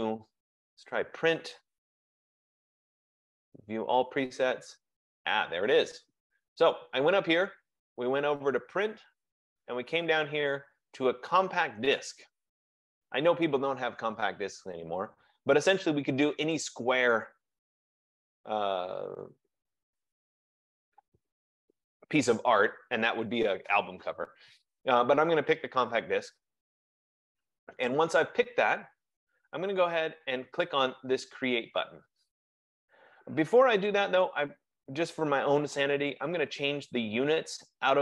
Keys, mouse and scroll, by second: 3.4 click, 13.8 F15, 16.8 click.